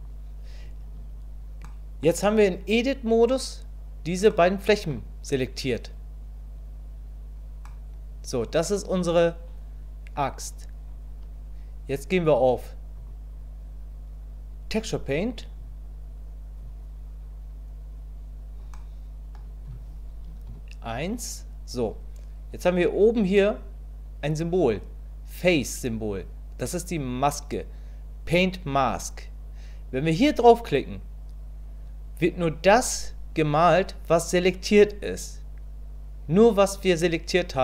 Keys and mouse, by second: 1.0 Tab, 1.6 middle click, 4.3 middle click, 7.6-10.1 middle drag, 13.1-15.7 drag, 18.7 click, 20.5 KP_1, 29.9 click.